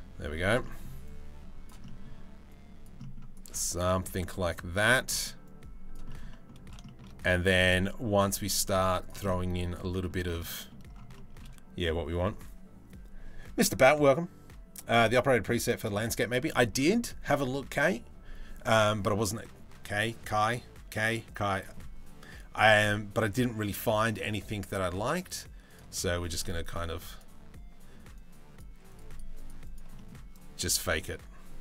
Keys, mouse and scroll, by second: 0.3 middle click, 0.7 click, 1.5 middle click, 2.1 right click, 2.6 middle click, 3.0-4.1 middle drag, 4.3 middle click, 4.7 middle click, 5.1 middle click, 5.7 middle click, 5.9 middle click, 6.5 shift+middle click, 6.8-8.7 middle drag, 8.9 middle click, 9.5 middle click, 9.9 shift+middle click, 10.1 middle click, 16.1 middle click, 25.7 click, 26.2 click, 26.7 click, 27.8 click, 28.5 click, 29.0 click, 29.3 click, 29.6 middle click, 30.1 click, 30.7-31.6 drag.